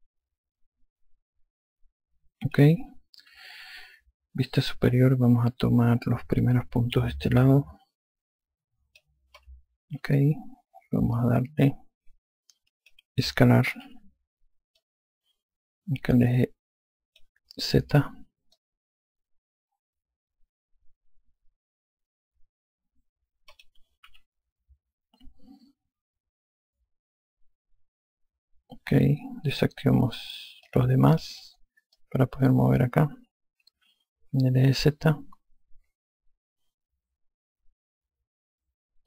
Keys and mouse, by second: 0.7 alt+click, 4.2 F2, 8.1 click, 10.8 F1, 12.0 alt+click, 15.7 click, 19.4 click, 24.9 F2, 31.5 click.